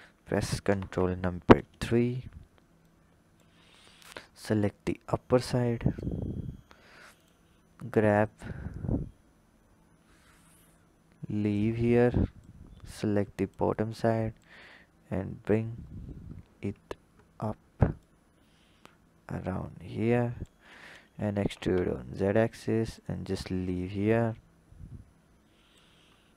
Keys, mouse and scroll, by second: 0.6 ctrl+KP_3, 1.6-2.8 scroll down 4, 2.8 click, 3.6-4.0 scroll up 3, 4.0 Tab, 5.1 click, 7.1-8.2 drag, 12.3 click, 14.4 click, 15.8-17.1 scroll up 8, 17.2-18.0 scroll up 1, 18.0 click, 21.2 e, 24.1-26.2 drag, 26.2-26.3 scroll up 3.